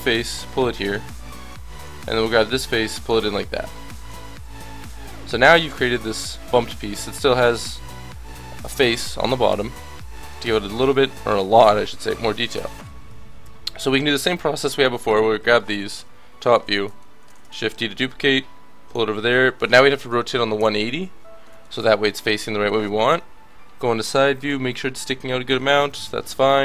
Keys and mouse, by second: 0.0-6.0 drag, 1.1 a, 1.6 b, 4.4 a, 4.9 Tab, 12.3 Tab, 13.4 KP_1, 14.8 l, 15.1 l, 15.4 l, 15.9 KP_7, 17.4 shift+d, 18.4 click, 19.3 r, 23.1 KP_3, 26.2-26.6 l.